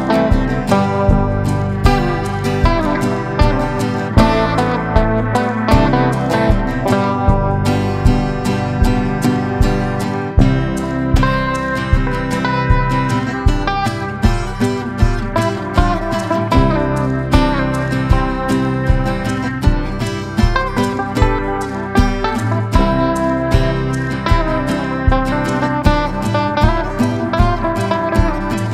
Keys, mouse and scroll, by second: 0.1 click, 1.8 Down, 1.9 Down, 2.1 Down, 5.5 click.